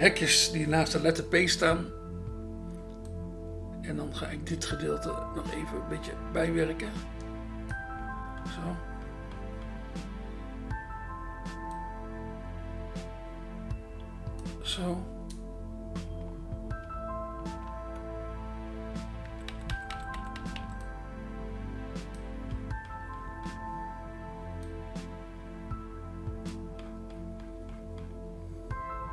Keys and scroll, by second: 19.3-20.5 typing.